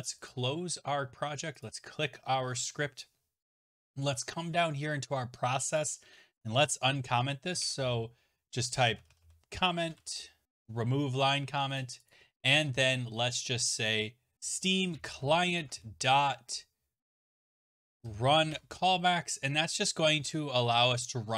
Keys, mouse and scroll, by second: 0.3 click, 3.5-5.3 scroll, 6.3 click, 7.6 ctrl+shift+p, 8.6-10.5 typing, 10.6 Return, 11.8 click, 12.1 click, 14.1-16.2 typing, 17.5-20.1 typing, 21.0 Return.